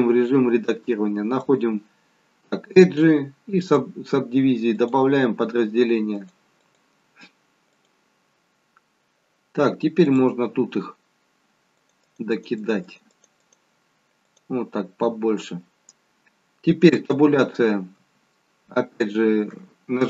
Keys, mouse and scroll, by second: 1.3 click, 4.7 click, 6.5 click, 10.0 click, 10.6 click, 11.6 click, 11.9 click, 12.2 click, 12.7 click, 13.0 click, 13.7 click, 16.9 Tab, 16.9 click, 17.9 Tab.